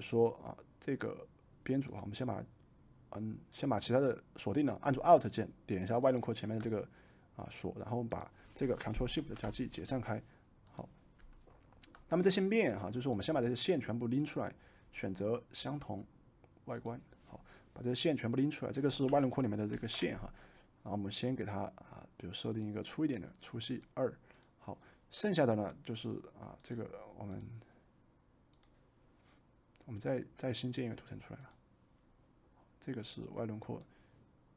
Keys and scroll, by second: 9.1 ctrl+shift+g, 19.6 ctrl+g.